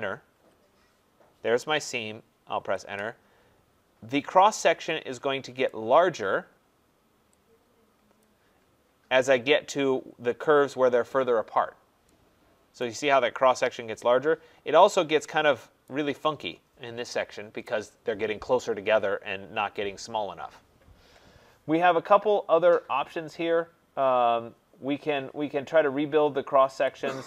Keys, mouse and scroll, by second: 0.3 Return, 2.5 Return, 5.6 right click, 5.9 middle click, 6.0 middle click, 8.2 click, 8.7 middle click, 8.8 middle click, 12.8 right click, 14.4 middle click, 14.4 middle click, 14.5 middle click, 14.6 middle click, 15.4 scroll up 4, 15.8 right click, 26.8 click.